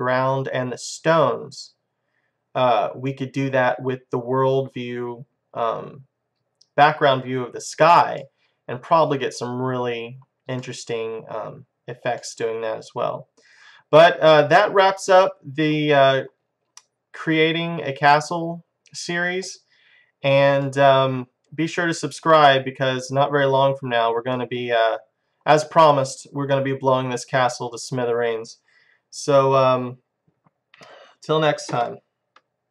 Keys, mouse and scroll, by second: 1.6-5.0 drag, 8.3-11.0 middle drag, 11.6-16.1 middle drag, 16.8-22.5 middle drag, 24.4 middle click, 24.9-32.7 middle drag.